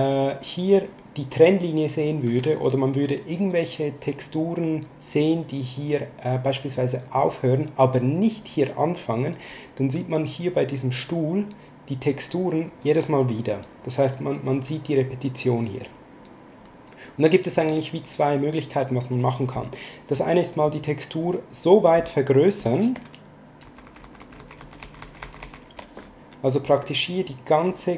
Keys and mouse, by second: 0.7 click, 2.2 s, 4.3 click, 6.7 click, 8.0 click, 10.5 click, 12.1 click, 17.5 click, 19.0 click, 23.7 ctrl+z, 26.6 click.